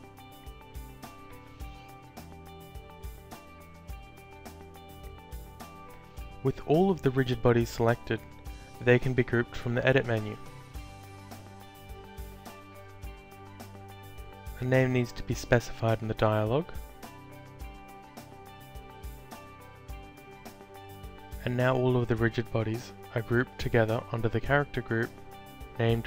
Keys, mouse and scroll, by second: 0.6 ctrl+click, 2.0 super+click, 3.5 alt+click, 4.5 ctrl+click, 5.7 alt+click, 8.2 click, 10.5 click, 16.2-17.7 typing, 18.0 Return, 19.8 click, 21.2 click, 23.7 shift+click.